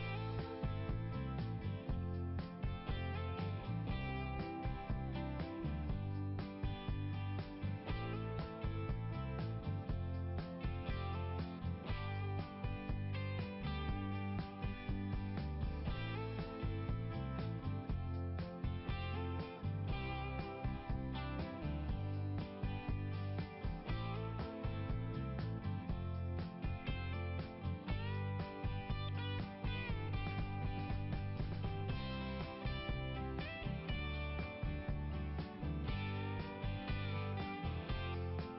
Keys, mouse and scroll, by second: 0.0 click, 2.2 click, 3.7 click, 4.8 click, 5.4 click, 6.6 click, 8.6 click, 9.6 click, 11.3 click, 12.9 click, 16.3-16.8 scroll down 1, 17.9 scroll down 1, 19.5 scroll up 1, 25.8 click, 26.4 right click, 26.6 right click, 28.0 click, 30.3 click, 30.5 click, 32.2-36.2 typing, 36.8 Return, 37.0 Return, 38.3 click.